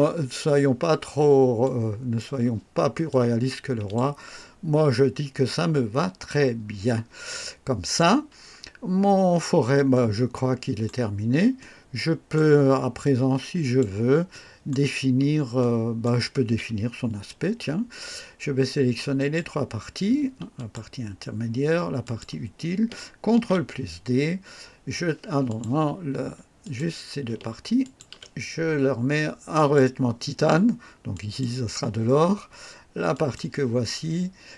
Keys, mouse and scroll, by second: 1.6 click, 3.0 click, 4.4-4.9 scroll down 1, 5.4 click, 6.6 scroll down 1, 7.2-8.1 right drag, 8.3-9.2 scroll down 2, 9.9-11.0 right drag, 11.5 right click, 13.0 click, 14.3 right click, 15.5-16.2 right drag, 19.1 click, 20.5 ctrl+click, 22.0 ctrl+click, 23.2 ctrl+d, 25.4 click, 26.6 click, 27.8 ctrl+click, 29.5 click, 31.1 click, 33.1 click.